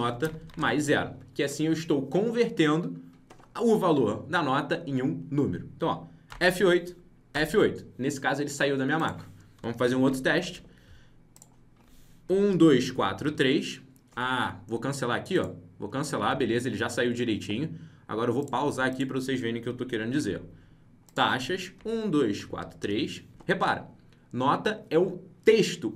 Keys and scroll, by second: 6.2 F8, 10.0 ctrl+b, 10.4 alt+Tab, 16.2 alt+Tab, 20.3 alt+Tab.